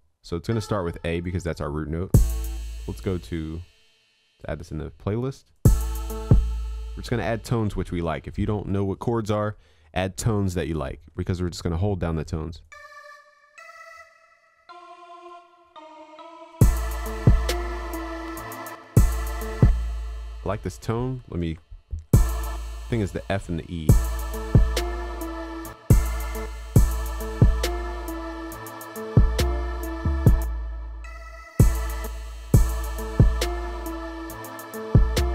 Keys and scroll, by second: 21.6 ctrl+Down.